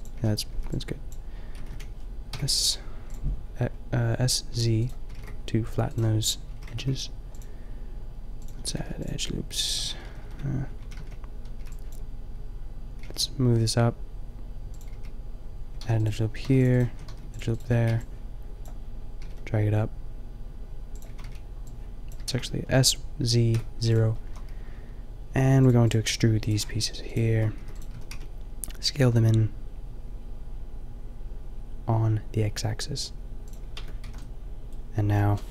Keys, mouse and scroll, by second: 0.2 a, 0.6 b, 1.5 s, 4.5 g, 5.2 s, 6.5 a, 6.8 ctrl+r, 8.5 a, 8.8 ctrl+r, 10.0 ctrl+z, 10.2 ctrl+z, 10.4 ctrl+z, 10.9 a, 11.6 b, 13.0 g, 14.8 click, 14.9 a, 15.8 ctrl+r, 16.1 click, 16.6 ctrl+r, 16.9 a, 17.2 ctrl+r, 17.6 a, 17.8 b, 19.2 g, 21.2 b, 22.2 s, 24.3 a, 27.6 e, 27.9 s, 33.5-34.4 drag, 33.8 Tab, 34.1 a, 34.4-35.5 middle drag.